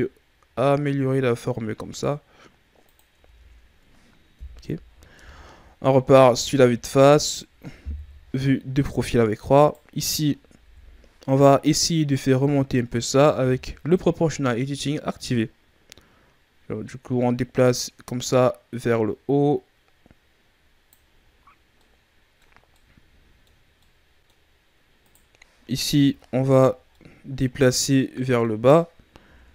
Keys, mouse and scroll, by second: 3.1 Tab, 4.3 KP_3, 5.0 KP_1, 6.1-6.6 ctrl+scroll down 2, 6.6 Tab, 7.9 KP_3, 9.5 right click, 10.5 KP_1, 13.2 o, 15.2 click, 21.7-25.0 middle drag, 25.0 right click, 25.7 KP_1, 26.9-29.2 middle drag, 29.2 ctrl+KP_3.